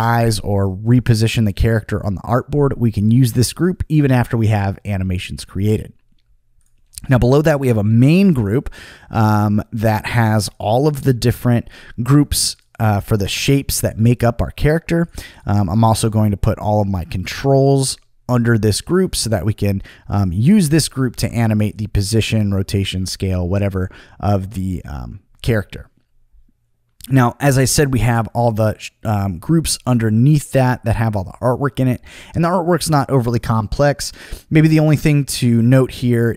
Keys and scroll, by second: 21.1 super+z, 22.2 super+z.